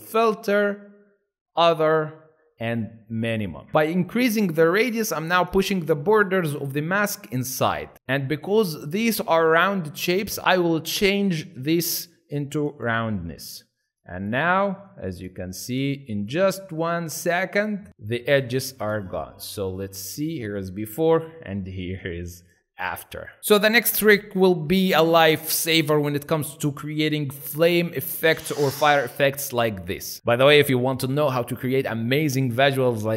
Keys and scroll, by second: 20.6 ctrl+alt+z, 22.2 ctrl+alt+shift+z.